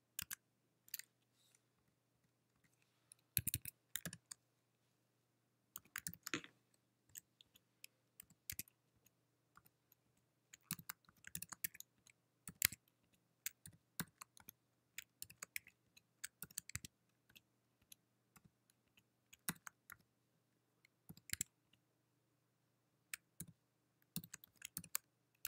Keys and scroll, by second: 4.3 &, 7.6 Right, 8.4 -, 8.8 1, 9.8 =, 10.2 Right, 11.1-22.1 typing, 23.6 *.